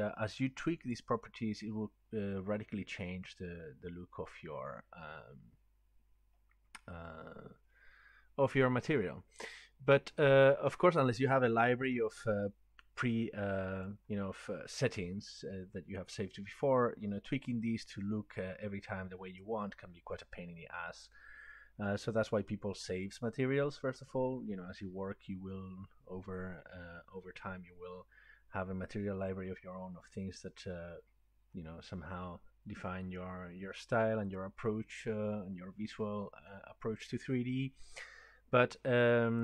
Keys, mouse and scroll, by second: 0.9 click, 4.0-4.8 scroll, 13.9 click.